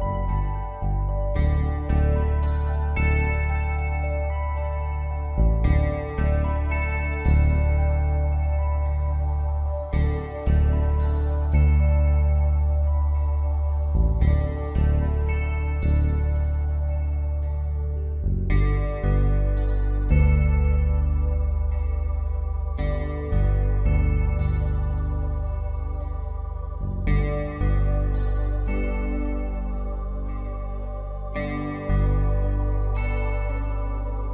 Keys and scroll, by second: 2.2 ctrl+shift+t, 23.0 ctrl+shift+t, 29.5 ctrl+d.